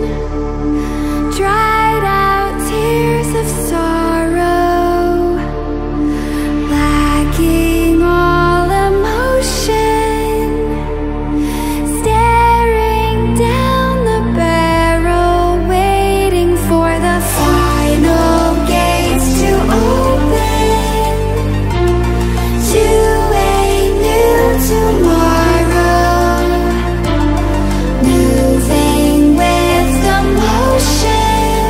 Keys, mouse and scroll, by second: 1.6-10.6 drag, 11.4 ctrl+alt+scroll up 1, 13.3 click, 15.7-19.7 alt+drag, 19.7 ctrl+d, 21.9 click, 21.9 click, 22.8 ctrl+alt+scroll down 1, 24.4 ctrl+alt+scroll up 1, 25.5 space, 25.8 click, 26.1 space, 27.1-31.6 drag.